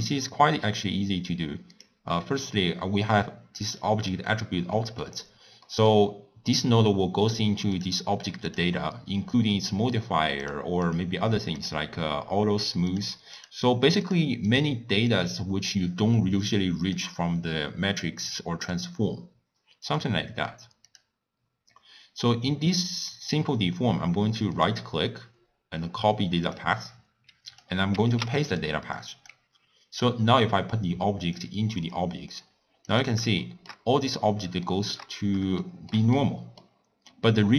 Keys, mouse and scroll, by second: 7.8 click, 8.5 click, 18.8 click, 28.7 click, 31.7 click, 33.4 shift+middle click, 33.8 scroll down 1, 33.9-34.7 scroll up 2, 34.7-35.1 shift+middle drag, 35.1-35.6 scroll up 1, 35.6-37.5 shift+middle drag.